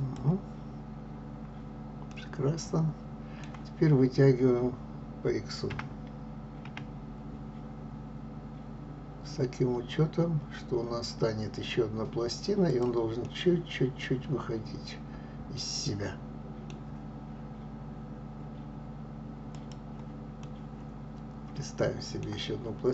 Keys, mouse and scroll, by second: 0.7-1.7 scroll down 2, 1.7-5.3 middle drag, 5.3 s, 12.8-16.0 middle drag, 19.1 click, 20.0-22.9 middle drag.